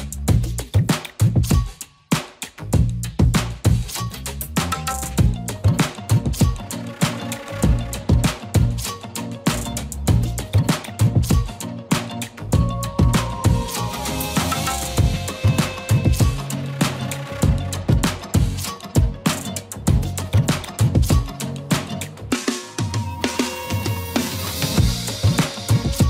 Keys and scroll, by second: 0.0 e, 0.9 b, 8.6 ctrl+z, 10.0 ctrl+z, 11.3 ctrl+z, 13.4 space, 17.0 b, 17.6 b, 18.2 space, 22.7 ctrl+z, 24.8-26.0 typing, 25.9 ctrl+z.